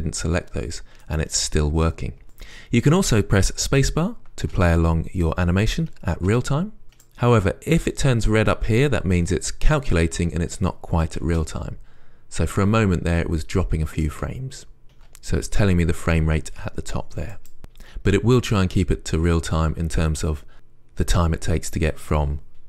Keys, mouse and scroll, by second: 1.3-6.8 right drag, 4.7 space, 6.4 space, 7.2-11.5 right drag, 11.5 space, 14.2 space, 15.2 space, 17.6 right click.